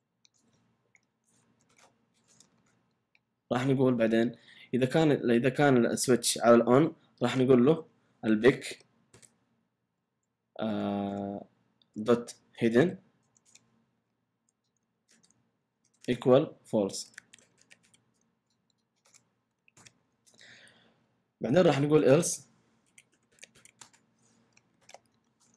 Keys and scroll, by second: 0.2 Return, 0.7 Right, 1.6-2.3 typing, 1.9 Left, 2.3 Return, 3.1 Up, 7.3 Return, 8.2-10.8 typing, 12.5 typing, 13.4 Return, 13.9 Right, 14.0-14.8 typing, 15.8-20.3 typing, 19.0 Return, 20.8 Down, 22.0 Return, 22.6-25.5 typing, 25.4 Return.